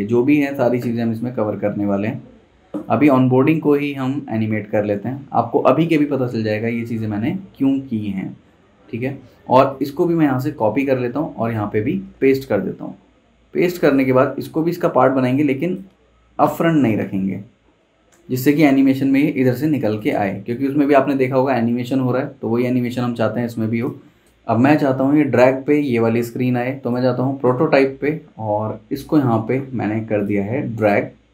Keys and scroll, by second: 10.4 super+c, 12.0 super+v, 16.9 shift+Left, 17.3 Right, 17.5 Right, 17.8 Right, 18.1 Left, 18.3 Left, 18.6 Left.